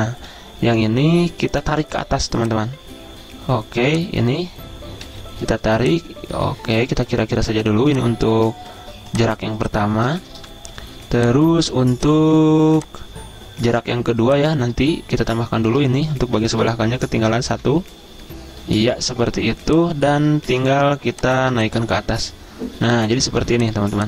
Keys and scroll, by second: 5.1 a, 10.4 v, 16.6 Left, 16.7 Left, 17.3 Left, 17.4 Left, 17.6 Left, 17.7 Left, 17.9 Left, 18.3 Left, 20.6 a, 23.8 z.